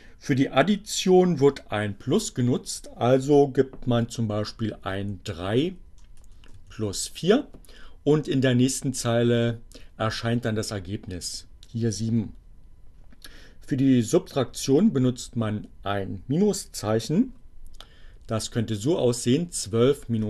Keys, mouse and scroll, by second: 3.7 2, 4.3 BackSpace, 6.2 3, 6.6 4, 6.9 Return, 16.3-17.2 typing, 19.4 5, 19.5 Return.